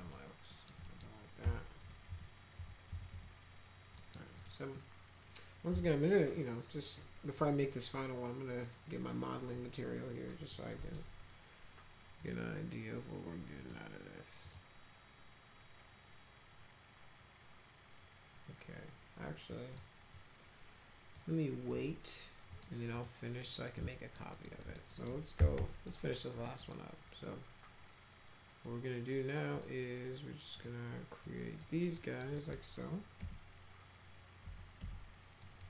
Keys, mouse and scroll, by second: 0.0 click, 0.5 middle click, 0.9 middle click, 1.4 F5, 1.8 F5, 2.1 F5, 2.6 F5, 2.9 F5, 3.1 F4, 4.0 middle click, 4.4 click, 5.7 m, 10.3 middle click, 10.9 click, 12.2 click, 13.6 click, 14.5 click, 19.5 click, 20.1-21.2 drag, 21.7 middle click, 22.5 click, 23.0 click, 23.8 alt+middle click, 24.4 alt+middle click, 24.6 middle click, 24.9 middle click, 25.1-26.1 typing, 25.9 middle click, 26.5 middle drag, 29.6 click, 30.6 click, 31.2-31.6 drag, 32.0 middle click, 32.4 middle click, 33.2 F3, 34.4 F2, 34.8 F3, 35.4 middle click.